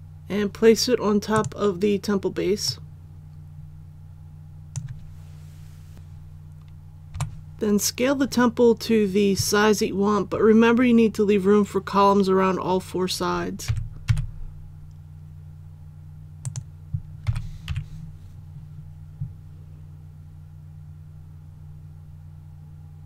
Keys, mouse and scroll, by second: 7.1 KP_7, 13.6 s, 14.0 x, 16.4 click, 17.2 s, 17.6 y, 19.4 typing.